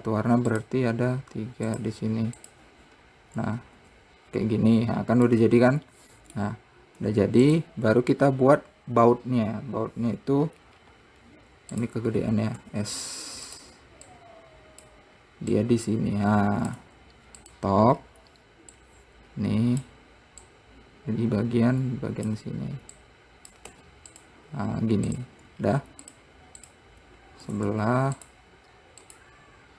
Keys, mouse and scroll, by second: 0.3 click, 2.5-4.4 drag, 4.4 Tab, 4.9-5.5 scroll down 2, 5.5 scroll down 3, 5.9-7.5 middle drag, 7.5 `, 8.8-9.9 scroll up 1, 9.9-10.9 scroll down 2, 11.0-12.4 scroll down 5, 12.4 click, 13.2 s, 14.7 click, 16.2 click, 18.5-18.9 scroll up 1, 19.3 click, 21.0 click, 23.6 click, 24.2 `, 25.7 click, 26.2-26.7 scroll down 2, 26.7 click, 27.2 click, 28.0 shift+d, 29.6-29.7 drag.